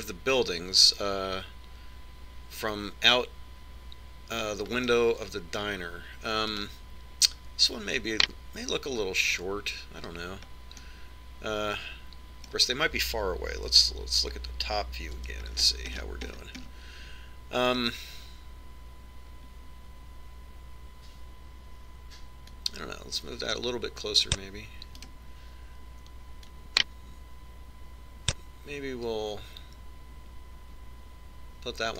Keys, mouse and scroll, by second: 6.5-8.2 middle drag, 8.2 right click, 12.5-14.3 middle drag, 15.3 KP_7, 16.2-19.0 middle drag, 16.9 KP_5, 19.4-21.2 middle drag, 24.3 click, 26.8 right click, 28.2 click.